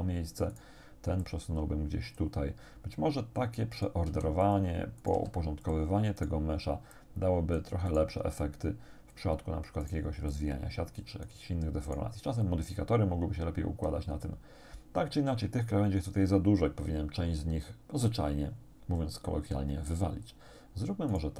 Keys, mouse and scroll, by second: 0.6 right click, 1.2-2.4 drag, 3.8 right click, 4.1 g, 4.4 click, 5.0 right click, 5.2 g, 5.7 click, 6.2 right click, 7.0 click, 7.9 right click, 8.4-9.4 drag, 9.8 right click, 10.4-11.5 drag, 11.9 right click, 12.5-14.1 drag, 21.2 right click.